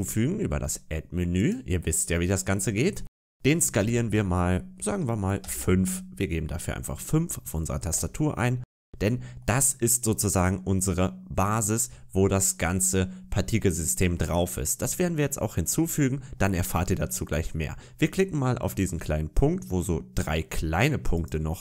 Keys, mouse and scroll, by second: 2.4-3.7 scroll down 1, 3.7 s, 8.6-9.3 scroll up 3, 9.3 middle click, 13.7 middle click, 21.0 click.